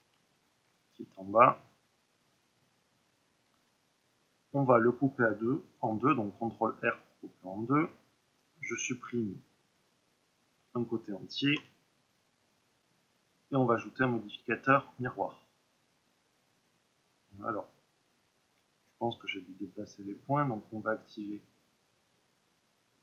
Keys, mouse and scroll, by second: 2.0-3.5 drag, 3.5 Tab, 4.0-7.0 middle drag, 5.7 ctrl+r, 7.0 click, 8.4 shift+click, 8.9 middle click, 9.7-11.5 shift+drag, 11.5 Delete, 13.7-23.0 drag.